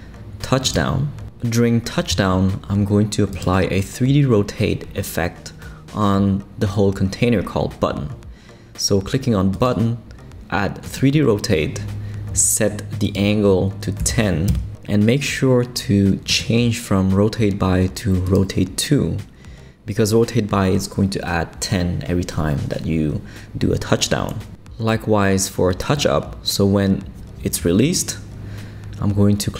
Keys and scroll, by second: 13.8-14.6 typing.